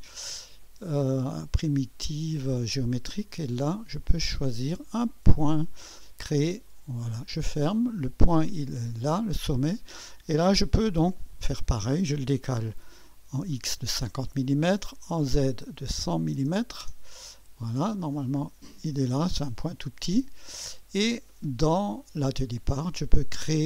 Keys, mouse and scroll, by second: 0.0 click, 4.0 click, 5.4 click, 6.7 click, 7.4 click, 8.7 click, 11.3 click, 12.7 5, 13.6 0, 14.9 click, 15.7-17.5 typing, 17.5 click, 20.1-21.2 middle drag, 20.1-21.2 right drag, 21.2 typing.